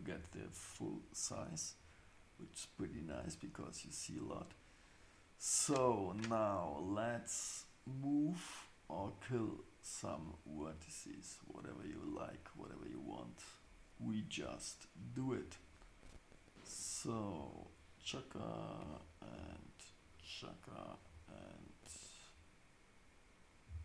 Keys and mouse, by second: 3.1 Tab, 23.6 x.